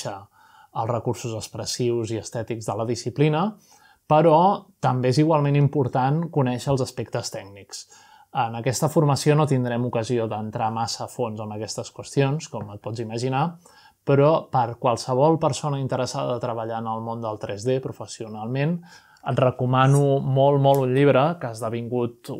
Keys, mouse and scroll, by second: 1.5 click, 4.8-6.2 drag, 6.8 middle click, 8.9-10.7 middle drag, 12.5 click, 13.5 click, 14.4-15.9 middle drag, 17.0 middle click, 18.8 click, 19.5 click, 20.4-21.7 middle drag.